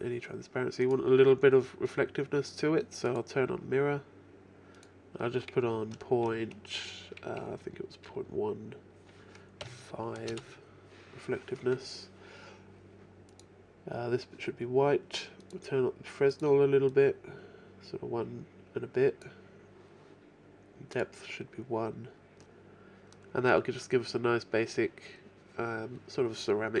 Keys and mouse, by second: 0.9-3.0 drag, 3.0 middle click, 3.5-7.8 drag, 7.8-11.4 middle drag, 13.3-18.5 drag, 18.5-19.8 middle drag, 21.0-22.9 drag, 22.9 middle click, 24.6-26.8 middle drag.